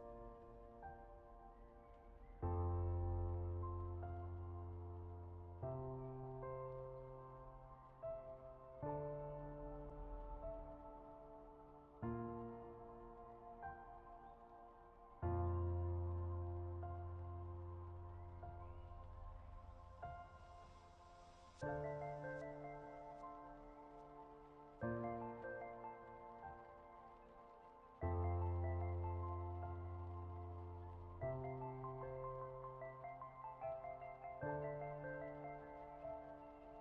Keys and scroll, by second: 3.3 ctrl+z.